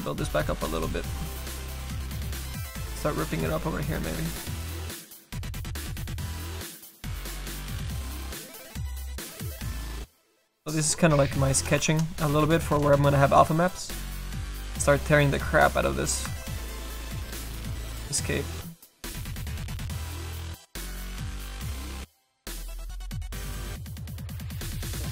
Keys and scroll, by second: 2.2 s.